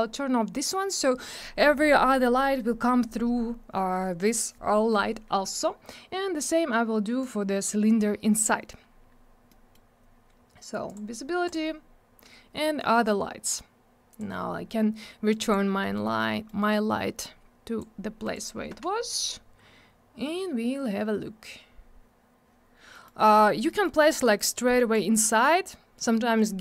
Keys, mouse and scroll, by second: 6.2 scroll up 1, 7.2 click, 8.1 scroll down 1, 9.4 middle click, 10.8 click, 11.4 click, 14.1 click, 15.3 click, 15.8 middle click, 16.1-16.4 scroll down 1, 16.4 middle click, 17.2 click, 18.2 right click, 22.9 middle click, 23.1-23.6 scroll up 1, 23.6 middle click, 24.3 click, 26.0-26.6 scroll up 1.